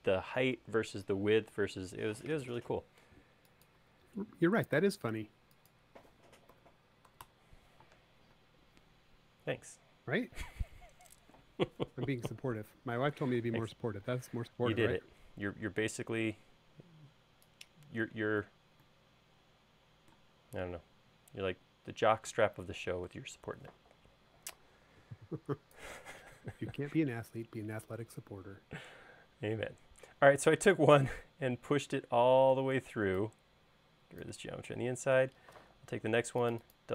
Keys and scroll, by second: 6.5-7.2 typing, 8.4 space, 14.8 p, 32.9 e, 35.6 p.